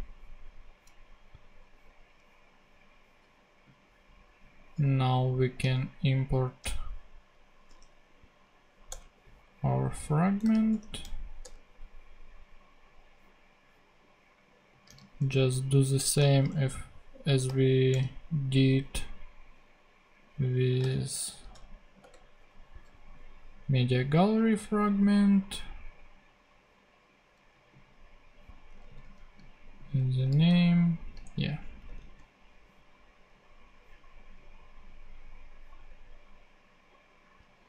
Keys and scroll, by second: 7.7 p, 8.9 Return, 10.7 shift+p, 11.4 shift+Return, 12.1 Return, 16.4 shift+p, 17.4 shift+r, 20.5-21.5 typing, 22.0 Return, 28.9 super+c, 30.3 super+f, 30.5 super+v, 31.8 ctrl+super+Tab.